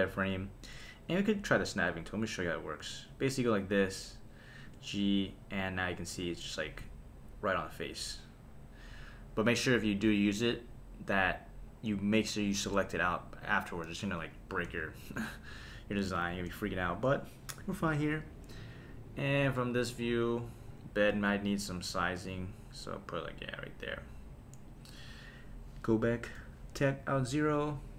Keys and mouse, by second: 1.6-3.7 drag, 6.6 click, 6.6 g, 9.7 g, 12.1 click, 13.4 click, 14.7 super+s, 19.4 KP_0, 21.1 s, 24.7 click, 26.3 KP_0.